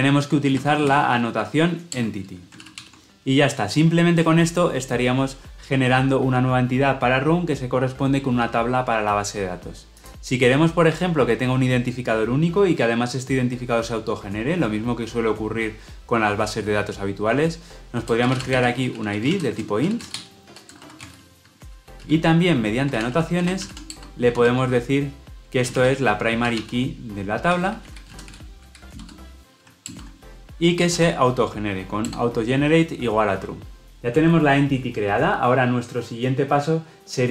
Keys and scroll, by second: 2.0 Return, 2.7 ctrl+alt+o, 21.4 Tab, 29.8 alt+Return, 32.0 Return.